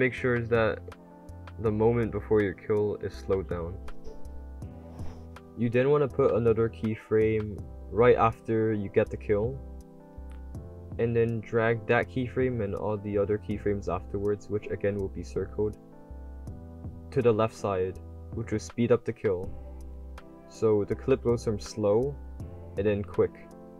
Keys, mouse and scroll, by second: 0.0-3.0 typing, 0.2-0.7 drag, 1.2-2.6 drag, 3.0 click, 4.2-5.6 drag, 5.6 w, 7.1 click, 7.5 w, 14.9 click, 16.7-18.2 typing, 17.1 click, 18.0-19.2 drag, 20.7 click, 20.7 a, 21.6 click, 21.6 d, 22.2 click, 22.6 click, 22.6 d.